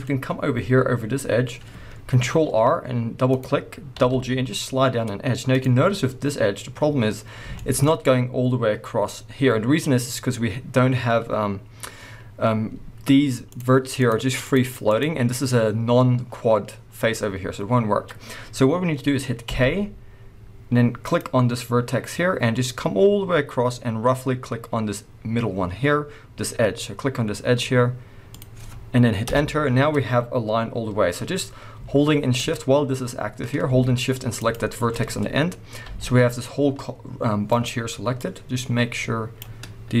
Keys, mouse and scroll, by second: 0.1-0.5 scroll up 1, 2.3 ctrl+r, 5.6 click, 7.2 scroll down 1, 7.5 shift+middle click, 7.8-8.9 scroll up 1, 13.5-14.1 drag, 14.4 click, 14.9 click, 19.4 k, 29.3 Return, 31.1-34.4 scroll down 1, 34.4 shift+click, 35.8 g, 37.6 right click, 38.2-40.0 drag.